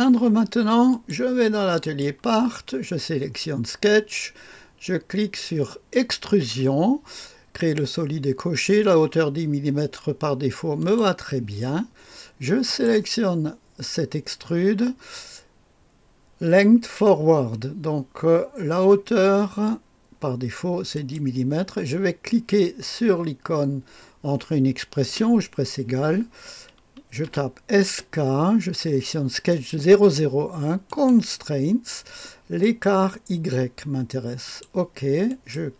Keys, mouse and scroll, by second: 0.8 click, 1.8 click, 5.8 click, 6.3 click, 10.7 click, 12.6 click, 20.9 click, 25.0 typing, 27.2-27.8 typing, 29.4 click, 30.8 click, 32.5 click, 34.4-35.7 drag.